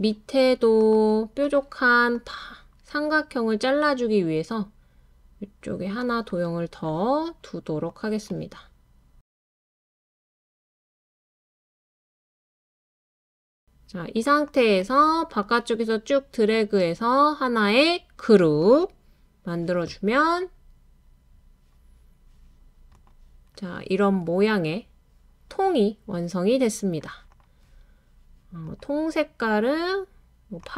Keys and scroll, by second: 23.7-24.7 typing, 25.9 typing.